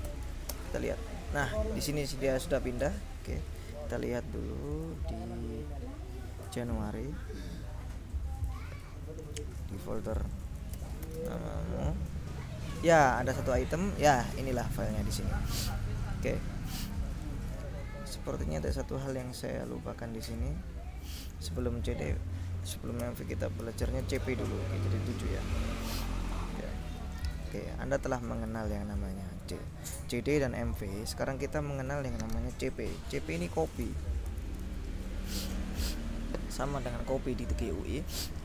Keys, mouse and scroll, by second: 0.3 ctrl+s, 0.6 ctrl+Return, 3.6 click, 4.8 click, 5.2-5.8 scroll up 2, 8.5 click, 10.8 ctrl+i, 11.2 ctrl+n, 11.3 ctrl+m, 11.5 ctrl+a, 13.3 click, 15.7 click, 16.9 click, 18.7 click, 20.4 click, 21.2 click, 23.1 Return, 24.0 c, 24.3 p, 26.4 click, 27.5 click, 28.4 click, 33.6-34.4 typing, 35.6 ctrl+l.